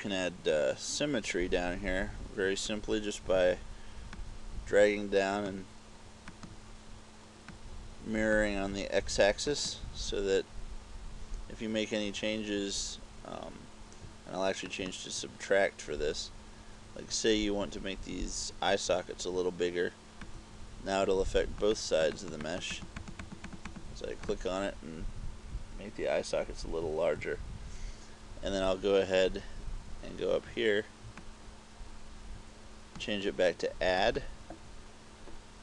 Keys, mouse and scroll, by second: 4.2 click, 6.4 click, 7.6 click, 9.6 click, 14.7 click, 20.4 click, 21.8 click, 22.2 click, 22.5 click, 22.8 click, 23.1 click, 23.3 click, 23.5 click, 23.8 click, 24.4 click, 25.3-27.6 typing, 31.4 click, 34.1 click.